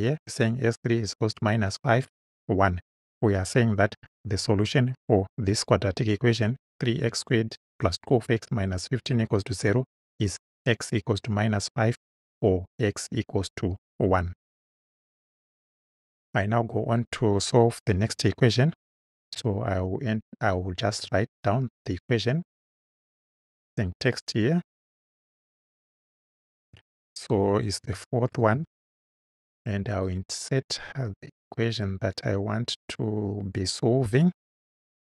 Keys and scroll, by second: 27.4 4, 27.9 ., 28.4 space, 34.9-35.2 typing.